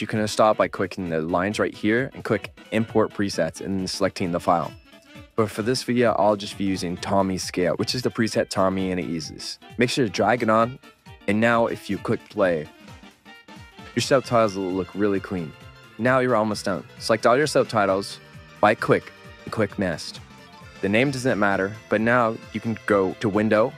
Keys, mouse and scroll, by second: 15.9-18.1 drag, 16.0 w, 20.7 click, 20.7 w.